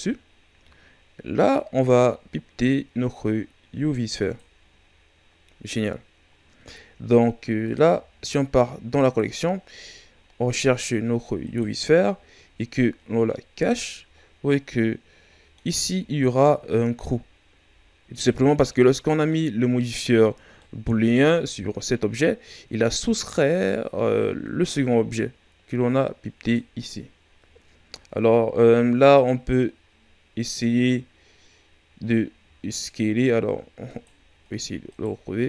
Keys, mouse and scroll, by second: 1.4-4.4 drag, 7.6-9.7 drag, 9.7 scroll down 1, 10.4 scroll down 10, 11.4-13.6 right drag, 13.6 click, 14.1 scroll down 2, 14.5-15.7 middle drag, 15.7 scroll up 2, 16.4-19.7 middle drag, 19.7-20.6 scroll down 2, 20.6-21.2 middle drag, 21.2-24.2 right drag, 26.4-29.5 drag, 33.9 click, 34.9 right click.